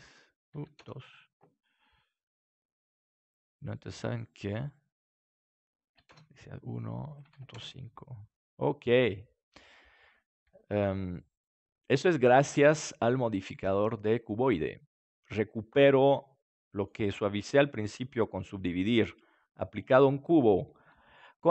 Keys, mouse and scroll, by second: 8.4 middle click, 10.6 s, 12.9-14.7 drag, 14.7-17.8 middle drag.